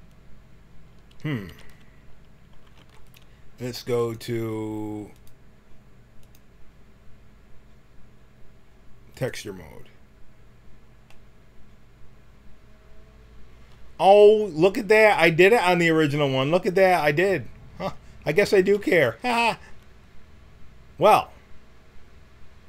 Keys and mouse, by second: 1.1 a, 1.5 a, 2.7 t, 3.9-5.8 drag, 6.2-8.7 drag, 9.6-11.8 middle drag, 15.0 click, 15.4 middle click, 15.5 middle click, 15.8 click, 16.7-17.9 middle drag, 18.1-19.3 middle drag, 18.8 a.